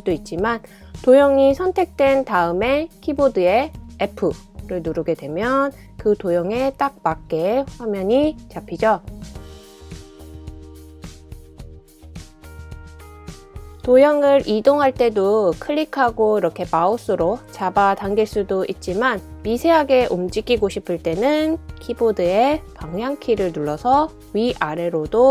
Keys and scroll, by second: 3.7 f, 4.0 f, 7.9 f, 8.0 f, 11.2 f, 11.5 f, 22.0 Right, 22.0 Right, 22.2 Right, 22.3 Right, 22.4 Right, 22.7 Up, 22.8 Up, 23.0 Up, 23.0 Up, 23.2 Up, 23.3 Up, 23.5 Down, 23.6 Down, 23.8 Down, 23.9 Down, 24.4 Up, 24.8 Up, 25.0 Up.